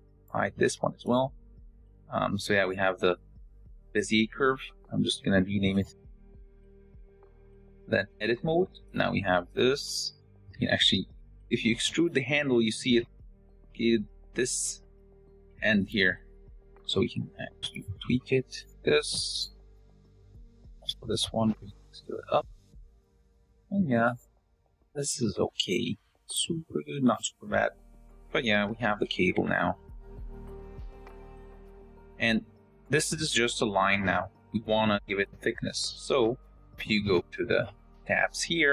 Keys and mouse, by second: 0.2 h, 0.5 click, 0.8 h, 2.3 click, 3.2 click, 4.8-6.5 drag, 7.9 Tab, 9.9 e, 12.3 g, 14.1 s, 15.0 s, 15.5 g, 15.9 r, 17.9 r, 18.3 s, 18.6 g, 19.5 r, 21.0 r, 21.3 s, 23.5 s, 23.9 g, 24.4 s, 25.6 click, 25.9-29.1 typing, 30.3 Tab.